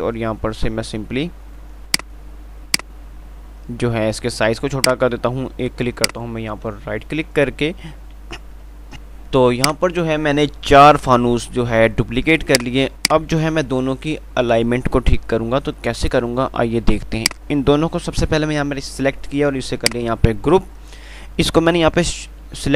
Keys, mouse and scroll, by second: 2.4 click, 2.4 typing, 6.2 ctrl+right click, 9.2 click, 12.9 click, 17.5 click, 17.5 typing.